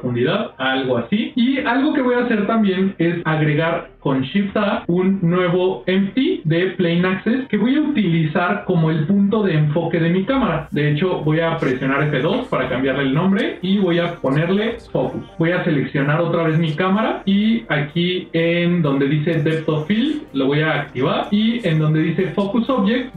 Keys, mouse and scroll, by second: 1.1 middle click, 4.4 shift+a, 12.2 F2, 15.6 click, 16.2 click, 20.2-23.1 drag.